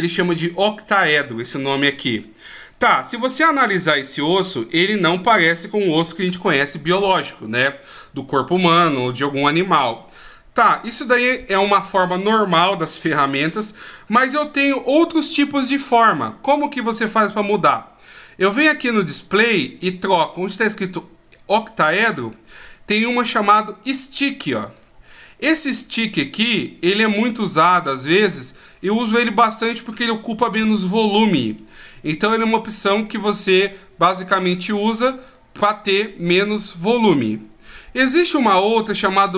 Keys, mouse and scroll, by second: 2.7 right click, 3.2-4.3 scroll up 2, 4.3-5.5 shift+scroll down 5, 5.5-6.4 ctrl+scroll down 9, 22.1 click, 23.7 right click, 24.6 click, 25.0 right click, 25.9 right click, 27.3 right click, 27.8 right click, 28.5 right click, 29.2 right click, 29.8 right click, 34.7 right click, 35.3 right click, 36.0 right click, 37.0 right click, 38.5 click.